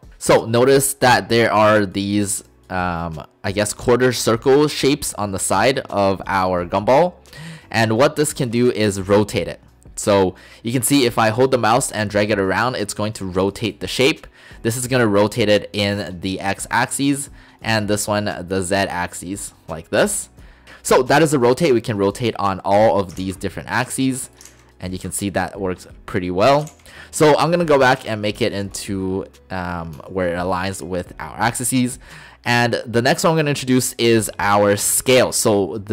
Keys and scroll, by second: 23.2 ctrl+z, 24.5 ctrl+z, 26.8 ctrl+z.